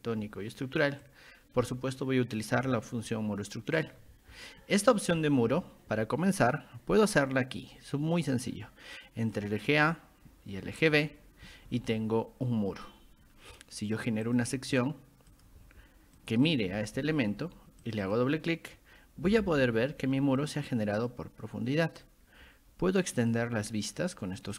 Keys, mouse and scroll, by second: 1.0 ctrl+click, 3.8 click, 9.3 click, 10.9 click, 12.5 scroll up 2, 13.2 scroll down 2, 14.3 click, 15.3 click, 16.2 click, 17.8 click, 18.0 click, 19.0-19.9 typing, 19.8-20.2 scroll down 2, 20.2 middle click, 20.2 scroll up 2, 21.0 click, 22.0-23.3 drag.